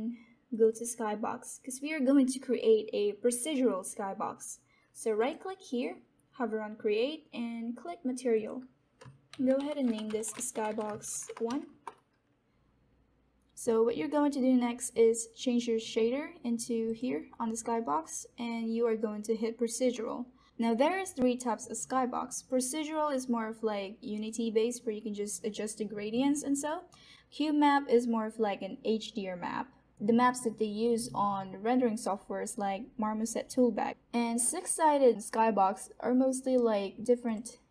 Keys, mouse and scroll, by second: 5.1 right click, 8.2 click, 9.0-12.1 typing.